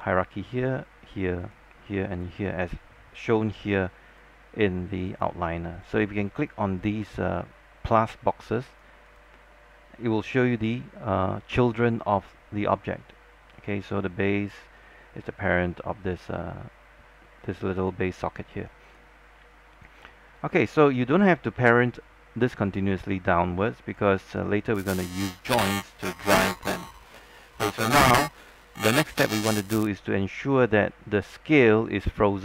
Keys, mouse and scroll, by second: 0.7-8.1 drag, 19.4 scroll down 1, 19.6 alt+click, 20.1 alt+middle click, 23.9 alt+click, 24.3 alt+middle click, 24.8 alt+click, 27.6-27.9 scroll down 1, 27.9-28.5 scroll up 1, 28.5-29.3 scroll down 1, 29.3-32.4 drag.